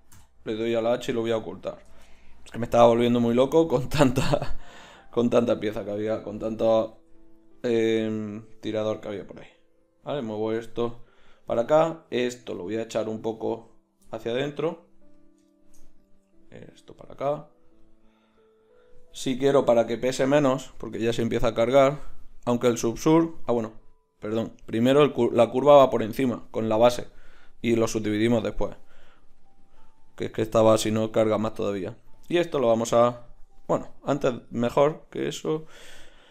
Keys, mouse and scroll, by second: 0.4 h, 3.7-7.0 right drag, 7.0 g, 8.9-14.0 drag, 9.5 g, 12.1 g, 16.0 g, 19.3 Tab, 23.6 click, 24.6-25.3 drag, 32.2-36.3 drag.